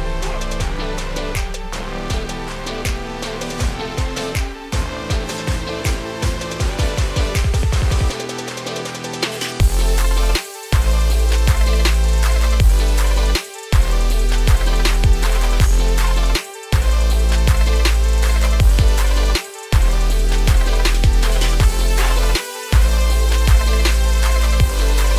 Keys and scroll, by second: 9.9 ctrl+a, 11.0 ctrl+x, 22.2 ctrl+v.